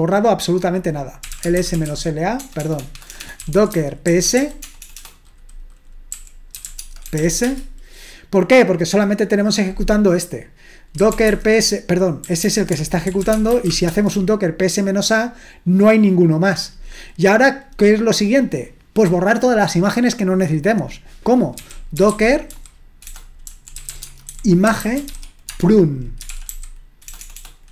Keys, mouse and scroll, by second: 1.1-7.6 typing, 10.8-14.1 typing, 21.4-27.7 typing.